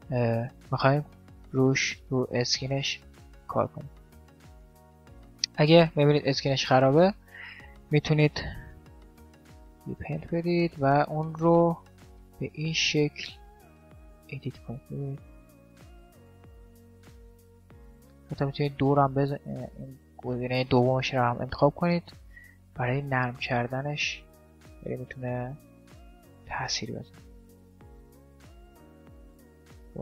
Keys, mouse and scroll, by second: 2.7 r, 3.7-9.3 middle drag, 6.4 r, 8.3 t, 9.5-11.0 drag, 13.5-15.2 drag, 15.1-16.3 middle drag, 16.3 ctrl+z, 16.6-18.3 middle drag, 18.3-19.7 drag, 19.7-22.6 middle drag, 23.3-30.0 drag.